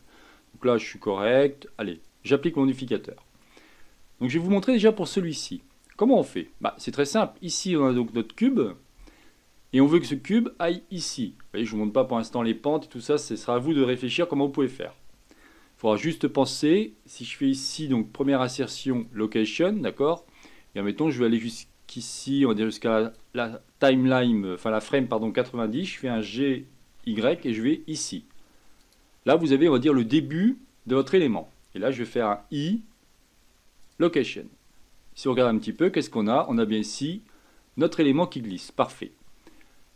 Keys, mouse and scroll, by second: 1.9 click, 2.7-5.2 middle drag, 5.2-5.7 scroll up 5, 5.7-6.3 shift+middle drag, 6.3-6.6 scroll down 1, 6.6-7.9 shift+middle drag, 7.9 click, 21.1-24.1 drag, 26.1 g, 35.7 click, 36.4 click.